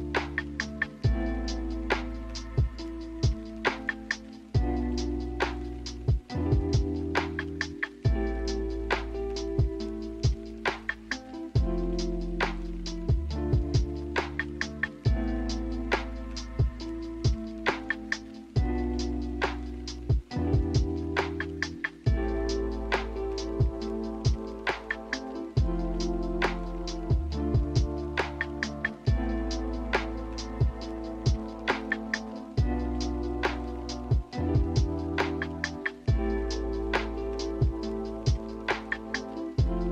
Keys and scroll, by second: 4.4 m, 11.1 m, 14.4 a, 22.6 a, 28.8 b, 29.8 Delete, 31.0 n, 32.3 a, 35.6 b.